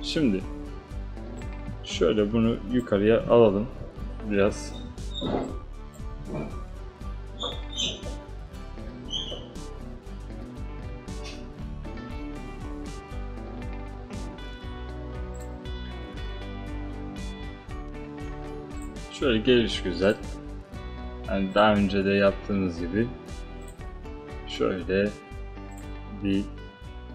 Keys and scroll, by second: 3.9 space.